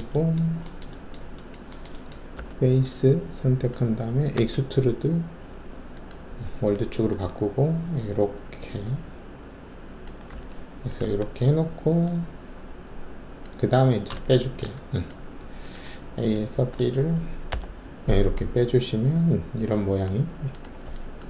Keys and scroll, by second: 2.3 alt+3, 4.3 alt+w, 10.2 alt+`, 11.0 w, 14.2 alt+shift+q, 17.5 alt+shift+o.